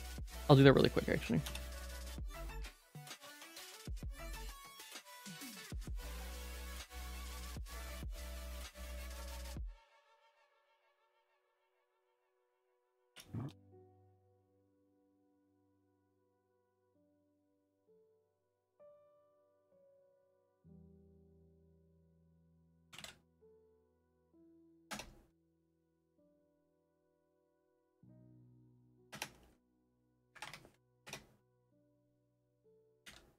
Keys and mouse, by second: 2.4 click, 2.5 shift+middle click, 3.5 middle click, 3.8 Tab, 3.8 /, 3.8 2, 4.2 shift+middle click, 4.8 ctrl+z, 5.0 middle click, 5.4 middle click, 5.7 1, 6.4 shift+middle click, 6.5 e, 8.5 e, 10.5 2, 11.7 click, 12.1 f, 12.4 3, 13.0 p, 13.9 Tab, 14.2 Tab, 14.5 a, 15.1 u, 16.2 u, 17.8 Tab, 18.4 ctrl+s, 21.5 F2, 22.8 ctrl+click, 24.1 F2, 26.6 click, 26.7 click, 27.6 click, 27.7-29.1 drag, 30.3 Up, 30.4 F2, 32.1 ctrl+s, 33.1 ctrl+s.